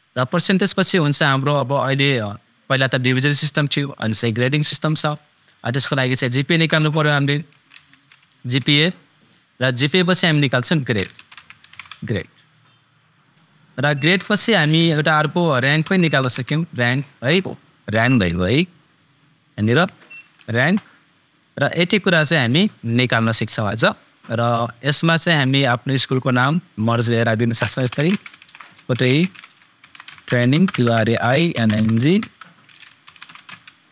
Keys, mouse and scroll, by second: 7.5 shift+super+g, 7.8 a, 8.6 super+Tab, 10.9 super+Tab, 11.1 shift+super+g, 11.3 super+r, 11.4 super+a, 11.6 super+d, 11.7 super+e, 14.5 super+Tab, 15.8 shift+super+r, 16.0 super+a, 16.1 super+n, 16.3 super+g, 16.8 Return, 18.7 super+click, 20.1 super+BackSpace, 20.5 super+Return, 22.7-26.7 super+drag, 27.8 shift+super+k, 28.0 shift+super+o, 28.1 super+t, 28.2 super+a, 28.3 super+h, 28.4 super+i, 28.5 super+space, 28.9 shift+super+t, 29.1 super+r, 29.7 super+a, 29.8 super+i, 30.1 super+g, 30.6 super+BackSpace, 31.5 n, 31.7 super+i, 32.2 super+BackSpace, 33.1 super+g, 33.3 super+space, 33.6 shift+super+e.